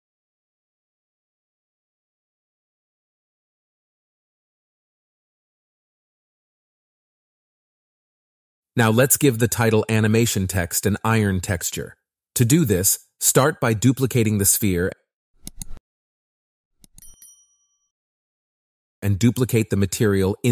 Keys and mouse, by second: 0.4 Tab, 0.5-5.2 typing, 0.9 Tab, 1.1 middle click, 1.2 Tab, 1.9 shift+click, 2.1 Tab, 2.5 Tab, 2.8 Tab, 2.9 click, 3.1 Tab, 3.5 Tab, 3.5 click, 3.7 Tab, 4.1 Tab, 4.1 click, 4.3 Tab, 4.8 Tab, 4.9 click, 5.0 Tab, 5.6 Tab, 5.7 click, 6.0-8.2 drag, 8.4-10.5 drag, 10.7 middle click, 11.3 click, 12.9 shift+d, 13.0 shift+click, 17.5-18.7 drag, 19.4 click, 20.3 middle click.